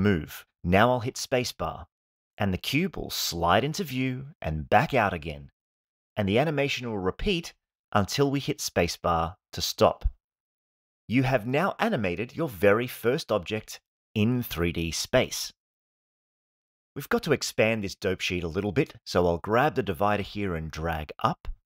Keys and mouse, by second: 0.7 space, 9.6 space, 17.8 click.